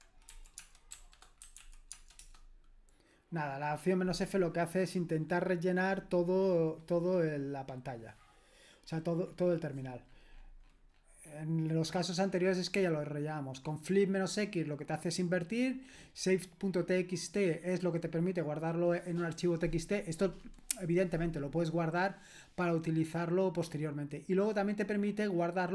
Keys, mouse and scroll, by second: 0.3-2.1 typing, 2.2 Return, 5.9-6.4 scroll up 1, 6.4-10.3 scroll up 1, 10.3-12.9 scroll down 2, 12.9-16.7 scroll down 1, 16.7-22.0 scroll down 1, 22.0-22.6 scroll down 1, 22.6-24.5 scroll down 1, 24.5 scroll down 1, 24.6-25.2 scroll up 2, 25.2-25.7 scroll up 1.